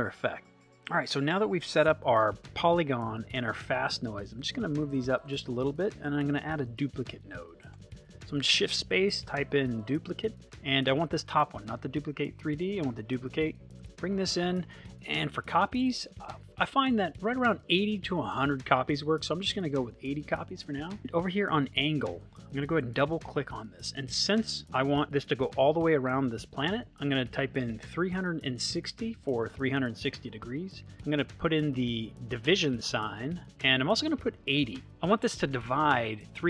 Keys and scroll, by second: 7.7 shift+space, 9.1 d, 18.3 8, 20.0 Return, 27.6 3, 28.2 6, 32.3 /.